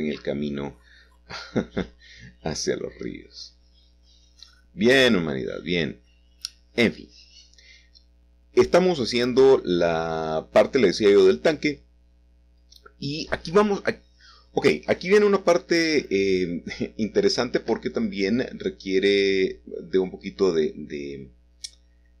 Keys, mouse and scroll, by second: 0.0 s, 1.9-3.1 drag, 5.1 s, 7.1-9.3 drag, 9.7 x, 11.0-12.4 middle drag, 12.6-14.5 middle drag, 14.6 g, 17.5-18.6 drag, 21.9-22.2 drag.